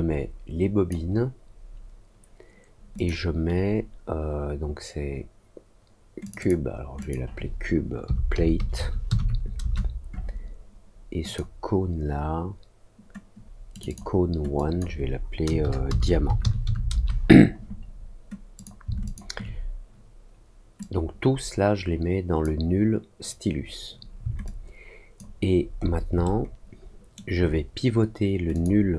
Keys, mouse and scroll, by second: 2.9 click, 6.2 click, 6.3 click, 6.9 click, 11.2 click, 13.7 click, 13.8 click, 14.5 click, 18.5 click, 19.0 shift+click, 20.7-22.3 drag, 24.4 alt+click, 25.4-26.0 alt+scroll up 2, 26.2 alt+middle click, 28.5 click.